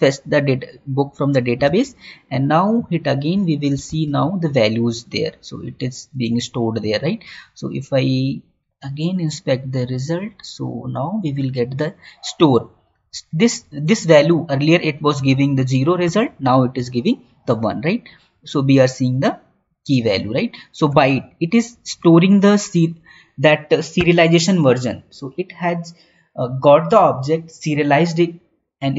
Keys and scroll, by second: 2.0 alt+Tab, 4.3 Tab, 15.9 Right, 20.8 Right, 21.1 Down, 22.0 Up, 23.9 Left.